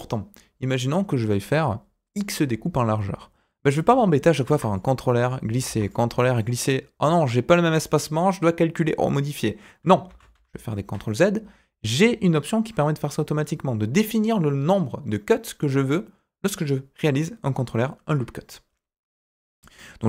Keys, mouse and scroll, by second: 4.4 ctrl+r, 5.6 ctrl+r, 10.0 ctrl+z, 10.3 ctrl+z.